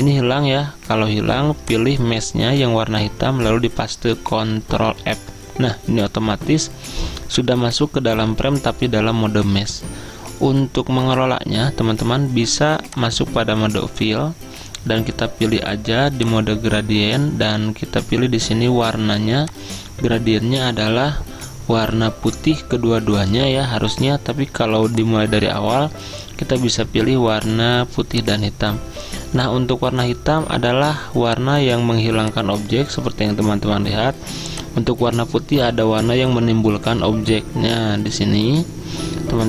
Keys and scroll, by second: 5.1 ctrl+f.